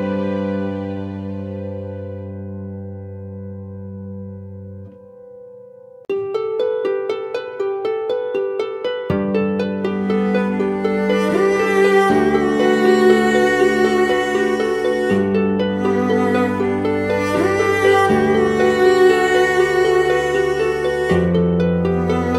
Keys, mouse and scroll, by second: 2.3 alt+shift+click, 6.4 alt+shift+click, 7.5 shift+Return, 9.1 Left, 10.0 Left, 13.1 ctrl+t, 16.9 ctrl+t, 19.0 shift+Left.